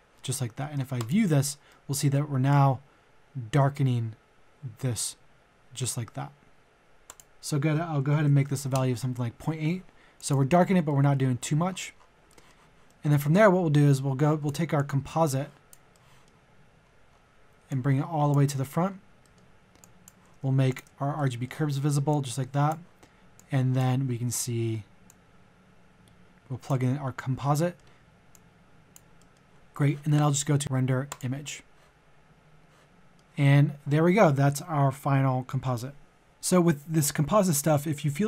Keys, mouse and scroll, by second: 0.9 ctrl+shift+click, 1.7 middle click, 2.4-6.9 drag, 6.9 middle click, 7.1 click, 8.0 KP_Decimal, 8.2 KP_8, 10.1 click, 10.9 middle click, 11.3 scroll down 1, 12.3 middle click, 13.9-15.9 drag, 15.9 middle click, 16.6-17.6 scroll up 1, 17.6 click, 18.5 middle click, 18.8-19.2 scroll up 1, 19.2 middle click, 19.8 click, 20.7 ctrl+click, 21.3 middle click, 23.4 click, 24.0-25.1 scroll up 1, 25.1-27.4 drag, 27.8 middle click, 28.3 click, 29.1 middle click, 30.6-32.1 drag, 32.9 alt+middle click.